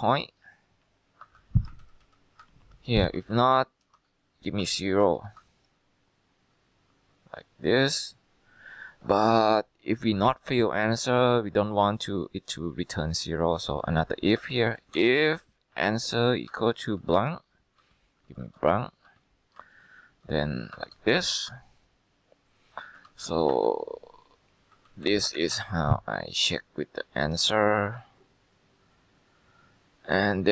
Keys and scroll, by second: 0.0 Right, 0.5 Down, 0.9 Left, 1.3 F2, 1.7-4.7 typing, 5.3 ctrl+Return, 14.2-19.2 typing, 19.7 Down, 20.8 ), 21.4 ctrl+Return, 23.2 ctrl+c, 23.6 Escape, 24.9 ctrl+v, 25.5 ctrl+Return.